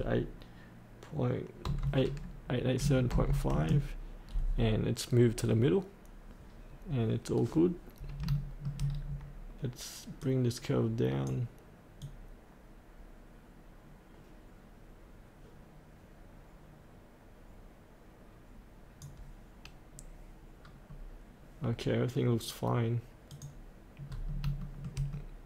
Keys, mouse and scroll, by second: 2.8 KP_Decimal, 3.1 KP_5, 7.4-8.2 scroll up 1, 8.3 shift+middle click, 8.8-10.2 scroll down 1, 10.2-19.7 drag, 19.9-23.3 scroll up 1, 23.3 click, 24.1 scroll up 1, 24.6 shift+middle click, 25.2 middle click.